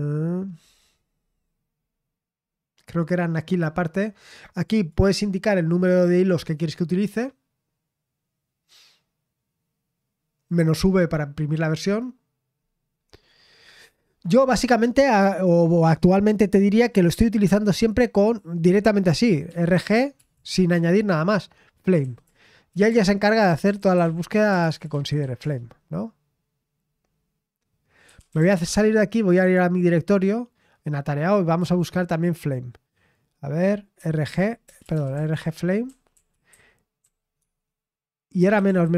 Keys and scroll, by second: 1.1-4.5 scroll down 1, 4.5-11.7 scroll down 1, 11.7-12.5 scroll down 1, 12.5-14.3 scroll down 1, 14.3-15.6 scroll down 1, 15.6-16.0 scroll down 1, 19.2-20.7 typing, 21.7-25.7 typing, 27.8-29.0 typing, 34.0-38.9 typing.